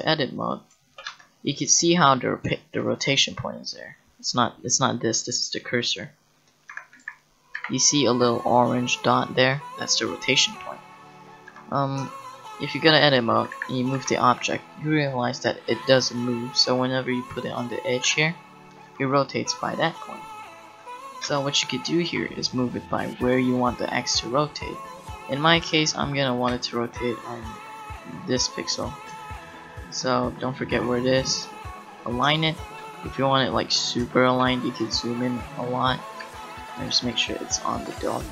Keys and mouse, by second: 1.1 Tab, 4.3 click, 6.8 Tab, 7.6 a, 11.5 Tab, 13.5 a, 14.0 g, 16.7 g, 18.0 Tab, 18.9 r, 21.2 Tab, 22.0 g, 28.3-30.1 drag, 30.8 g, 36.2 g.